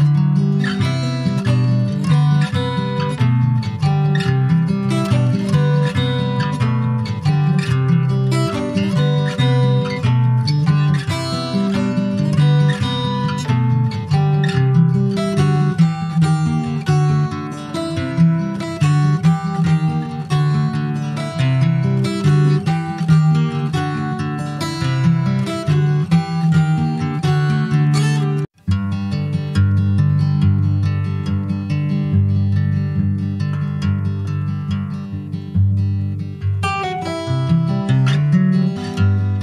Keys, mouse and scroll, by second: 0.2 ctrl+s, 0.3 click, 0.7 click, 1.3 ctrl+s, 1.7 click, 2.4 ctrl+s, 2.5 click, 3.2 click, 3.9 shift+click, 5.9 ctrl+l, 7.5 click, 7.9 middle click, 8.5 scroll down 2, 9.9 ctrl+z, 10.3 ctrl+z, 10.7 click, 11.3 click, 12.0 ctrl+s, 12.9 ctrl+a, 14.7 click, 15.3 ctrl+a, 16.7 click, 17.1 ctrl+z, 17.4 ctrl+z, 18.2 ctrl+z, 18.8 click, 19.5 click, 20.1 click, 20.9 shift+click, 22.4 ctrl+l, 23.7 click, 24.3-25.0 scroll up 2, 25.0 click, 25.9 alt+middle click, 26.4 alt+middle click, 27.1 alt+z, 27.3-28.1 scroll up 1, 28.1 click, 31.5-31.9 scroll up 2, 31.9 shift+middle click, 32.5 alt+z, 32.8 click, 33.5 click, 33.9 scroll down 3, 34.1 middle click, 34.6 ctrl+s, 34.7 click, 34.8 scroll down 5, 35.1 shift+middle click, 35.9 scroll up 1, 36.1 shift+middle click, 36.8 scroll up 1, 37.0-38.1 shift+middle drag, 38.1 ctrl+s, 38.3-39.4 middle drag.